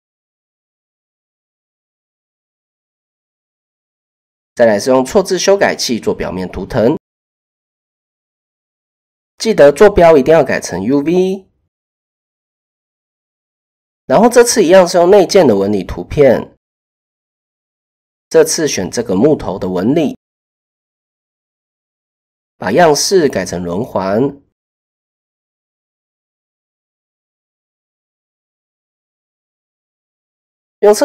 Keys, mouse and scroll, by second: 1.8 click, 9.0-10.0 drag, 11.4 click, 12.9 click, 13.2 click, 17.3 click, 17.8-19.3 drag, 21.4-23.0 drag, 25.4 click, 26.2 click, 28.4 click, 30.8 click.